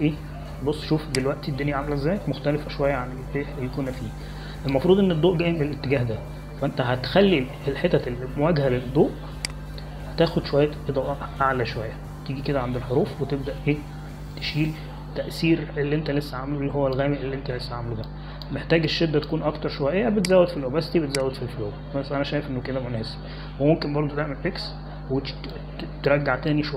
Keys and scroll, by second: 26.2 x.